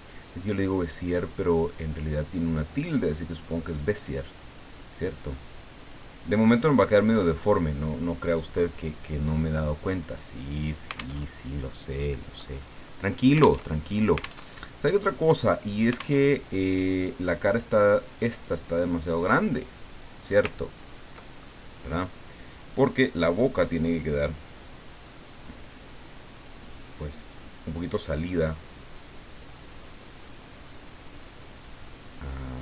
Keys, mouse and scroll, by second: 0.5 click, 5.1 click, 6.8 click, 10.1 click, 11.3 alt+Tab, 13.7 alt+Tab, 14.5 alt+Tab, 16.2 alt+Tab, 17.4 click, 18.5 click, 20.6-21.0 ctrl+scroll down 4, 21.4 ctrl+middle click, 21.6 click, 23.2-26.6 drag, 28.2-32.6 drag.